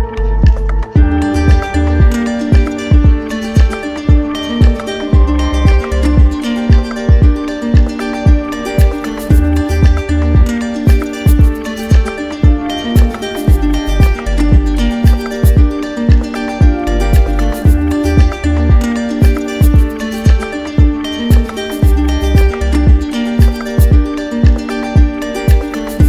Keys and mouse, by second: 0.4 alt+click, 6.7 alt+click, 7.5 alt+click, 10.9 click, 13.6 click, 14.6 click, 18.0-19.1 drag, 19.8 click, 24.2 click, 25.8 click.